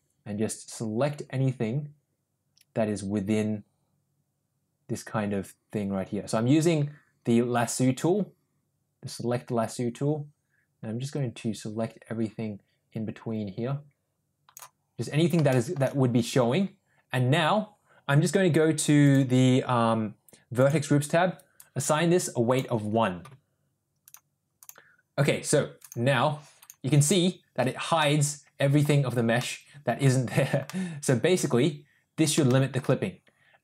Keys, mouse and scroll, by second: 15.5 shift+middle click, 19.1 click, 21.6 click, 22.5 click, 24.1 click, 25.9 click, 28.0-28.8 middle drag, 29.4-30.0 middle drag, 30.7-32.2 middle drag, 32.5 shift+middle drag.